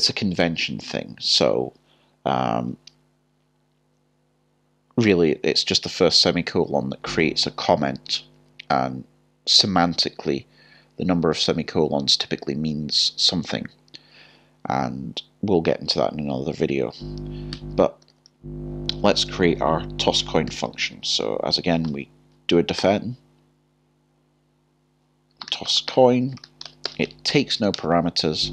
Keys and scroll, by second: 21.8-23.3 typing, 27.7 typing.